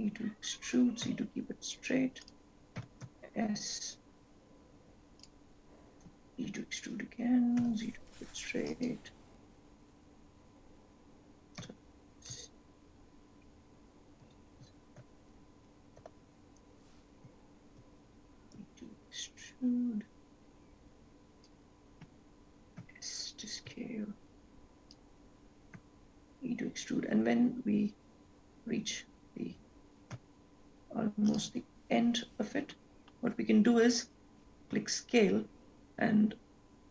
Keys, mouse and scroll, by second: 0.0 e, 3.0 s, 6.3 e, 10.1 e, 17.1 ctrl+z, 17.6 ctrl+z, 18.6 e, 23.0 s, 26.0 e, 34.9 s.